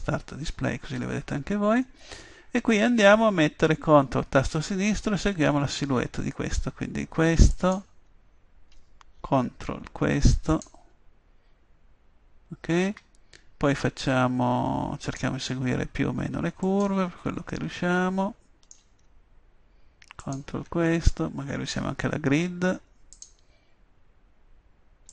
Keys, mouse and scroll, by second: 1.9-7.5 middle drag, 7.5-12.2 drag, 15.0-18.4 middle drag, 20.2-21.5 middle drag, 21.7 middle click.